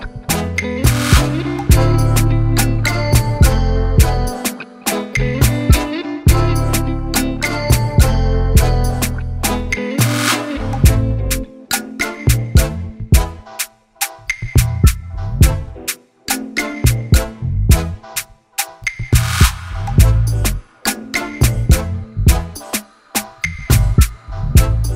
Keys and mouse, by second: 0.5-1.9 typing, 2.8 ctrl+click, 5.7 i, 6.1 i, 7.0 click, 7.6 click, 10.4 ctrl+d, 11.8 click, 12.3 click, 13.7 ctrl+click, 14.3 ctrl+BackSpace, 14.8 alt+BackSpace, 15.3 ctrl+d, 16.2 click, 20.2 click, 21.0 ctrl+t, 22.8 click, 23.9 Return.